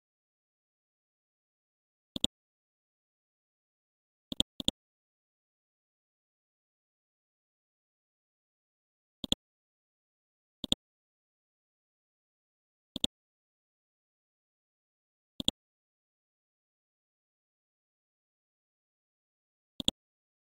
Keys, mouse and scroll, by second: 5.0-6.3 scroll down 1, 6.3-7.2 scroll up 1, 8.0-8.3 scroll down 1, 9.2 click, 9.7 scroll up 1, 10.6-16.6 drag.